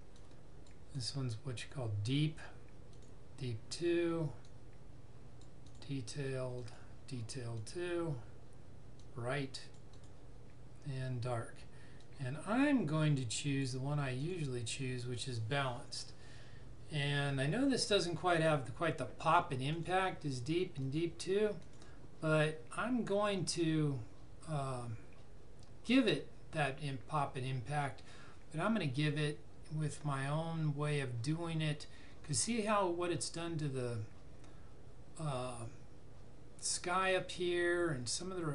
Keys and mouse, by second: 0.1 click, 18.1 click.